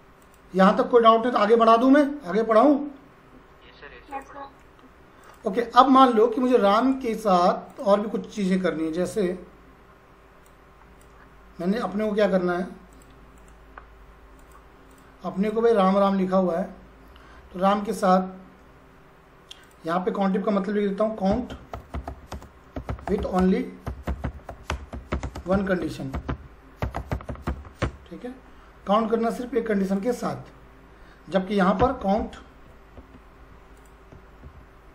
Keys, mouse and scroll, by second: 4.1 click, 6.8 right click, 7.8 click, 10.4-11.7 drag, 13.4 right click, 14.4 click, 19.6 click, 21.0-27.9 typing, 29.9 click, 31.8 c, 33.7 click, 34.4 c.